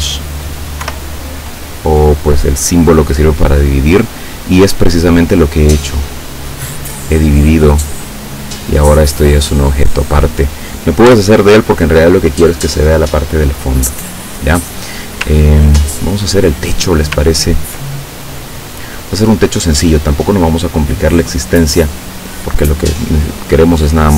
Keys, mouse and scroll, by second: 3.9-4.6 scroll down 4, 5.4 click, 6.0-7.1 drag, 8.1-10.2 drag, 11.1 Delete, 14.2-14.6 scroll up 2, 14.8-15.9 scroll down 3, 15.9-17.1 ctrl+drag, 17.3 ctrl+scroll down 2, 18.0 ctrl+click, 18.3 middle click, 21.9 click.